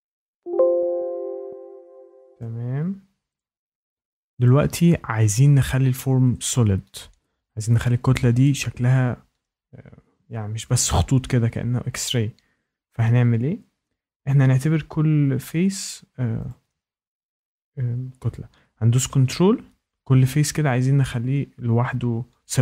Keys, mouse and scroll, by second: 0.2 click, 2.3 click, 2.4-3.2 scroll, 3.3 ctrl+click, 3.7 scroll, 4.4 click, 5.6 click, 6.0 scroll down 2, 6.8 scroll, 8.4 shift+right click, 13.6 scroll up 2, 16.4 click, 17.2 ctrl+click, 18.6 scroll.